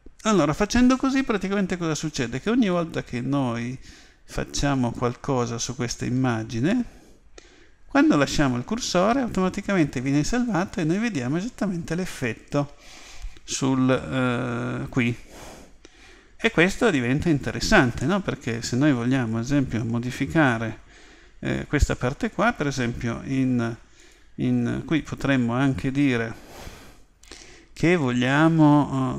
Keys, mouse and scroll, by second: 18.1-19.9 middle drag.